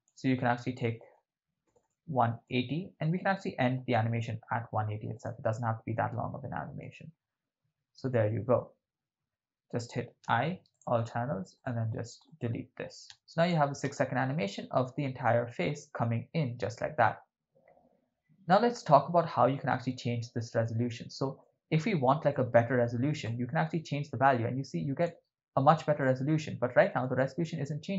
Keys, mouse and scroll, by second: 1.7 Right, 1.9 Right, 2.4 Right, 5.1-6.9 drag, 10.2 i, 11.6 right click, 12.3 right click, 13.1 x, 13.1 x, 13.6 click, 13.9 shift+space, 19.8 shift+space, 20.5 middle click, 21.4 ctrl+middle click, 22.3 middle click, 23.2-25.1 drag, 26.0-27.0 ctrl+middle drag.